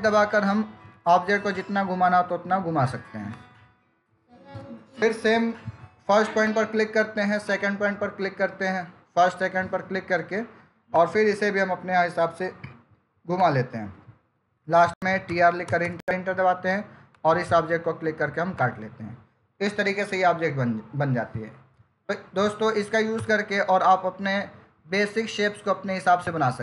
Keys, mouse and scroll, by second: 0.7 F8, 3.2 F8, 3.4 click, 4.4 Return, 6.3 click, 10.8 click, 23.0 Return.